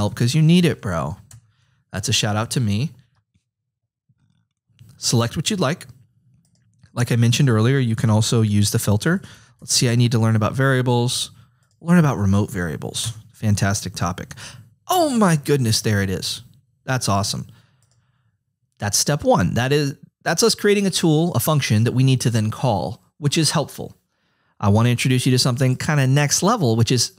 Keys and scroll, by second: 0.0-0.6 typing, 0.9 Right, 1.3 Return, 8.6-10.1 typing, 13.0 Return.